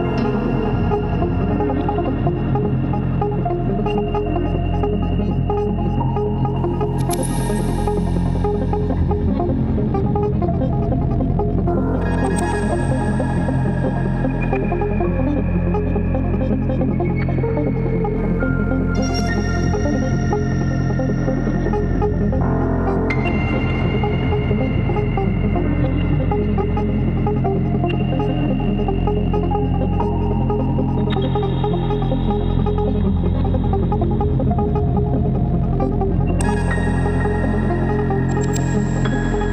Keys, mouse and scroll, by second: 0.2 right click, 6.2 right click, 11.4 alt+click, 12.8 alt+click, 13.9 alt+click, 14.4 alt+click, 15.7 alt+click, 16.1 alt+click, 18.3 alt+click, 18.6 right click, 21.3 alt+click, 22.5 alt+click, 23.1 alt+click, 24.2 ctrl+z, 24.3 space, 24.7 ctrl+z, 24.8 alt+click, 26.6 ctrl+BackSpace, 26.8 ctrl+-, 26.9 Escape, 27.0 ctrl+z, 27.1 ctrl+=, 28.1 alt+click, 29.5 ctrl+=, 29.6 ctrl+=, 30.7 ctrl+s, 31.0 alt+click, 31.4 Escape, 31.7 ctrl+d, 32.9 right click, 33.2 alt+click, 34.5 alt+click, 39.3 alt+click.